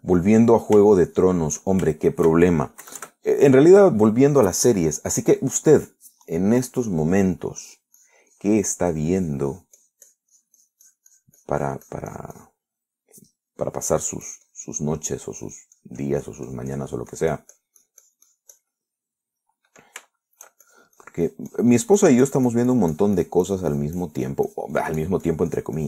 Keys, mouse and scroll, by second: 0.6 shift+middle click, 1.6 middle click, 2.2 shift+middle click, 3.2 shift+middle click, 4.1 KP_Add, 8.8-13.9 drag, 15.2 click, 16.0 middle click, 16.7-20.0 drag, 20.0 middle click, 21.3 shift+middle click, 21.9-25.8 shift+drag.